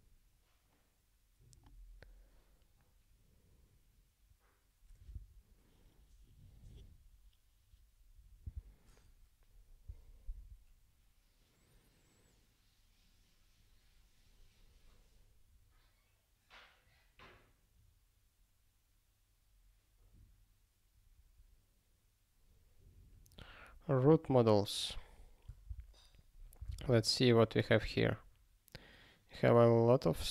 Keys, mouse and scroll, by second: 24.1 click, 25.7 ctrl+e, 27.3 ctrl+e.